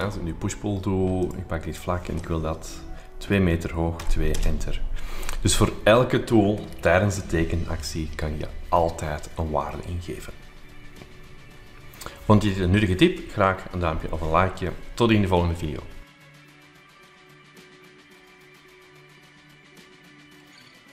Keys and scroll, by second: 3.9 2, 4.3 Return.